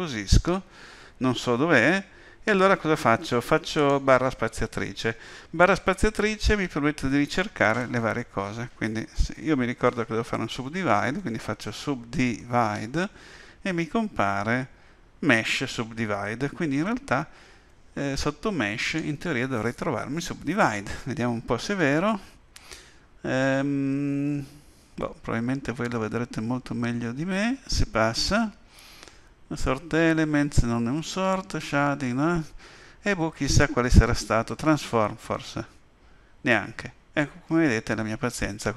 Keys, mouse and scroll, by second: 7.0 space, 18.8 click.